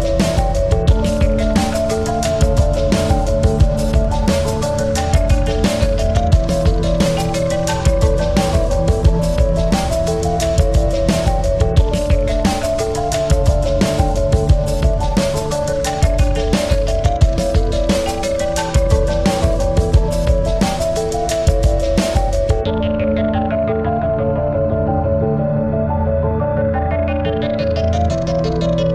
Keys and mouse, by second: 0.4 click, 1.9 click, 2.9 shift+y, 3.9 click, 5.2 click, 5.3 alt+click, 5.5-7.8 alt+drag, 8.9 click, 10.2 click, 10.8 shift+a, 12.2 click, 13.5 Up, 14.0 Down, 14.9 Down, 15.9-19.7 alt+drag, 20.2 click, 21.3 click, 21.8 shift+b, 23.4 click, 24.7 ctrl+click, 24.9 ctrl+-, 25.4 space, 26.1 space, 26.2 click, 27.8 ctrl+-, 28.4 space.